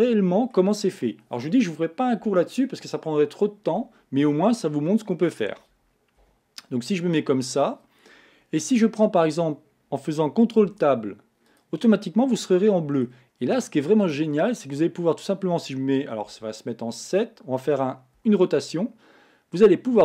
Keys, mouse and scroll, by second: 4.5-5.1 scroll down 1, 5.1-6.2 middle drag, 6.2 KP_1, 7.2-8.1 scroll up 2, 10.7 ctrl+Tab, 11.5 click, 12.2-14.0 middle drag, 14.0 click, 14.5-16.3 middle drag, 16.3 KP_7, 18.3 r.